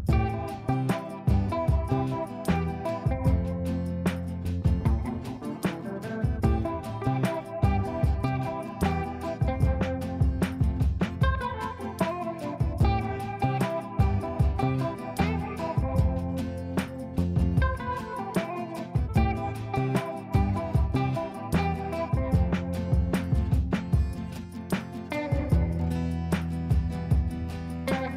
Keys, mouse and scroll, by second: 0.0-6.7 typing, 7.1 ctrl+space, 8.5 click, 9.4 click, 10.4 shift+click, 10.9 c, 11.1-14.0 drag, 15.1-16.1 shift+click, 20.9 space, 21.9 shift+click, 22.2 c, 23.2 click, 24.8 ctrl+right click, 25.9 click, 27.1 ctrl+space, 27.8 ctrl+space.